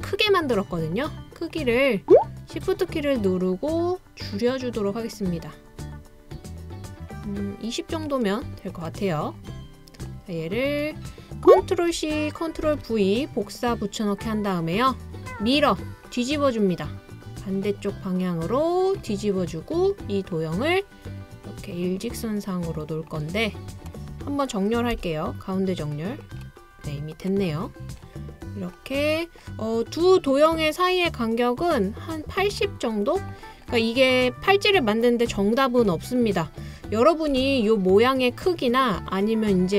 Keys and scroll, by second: 12.0 super+c, 12.6 super+v, 25.0 l.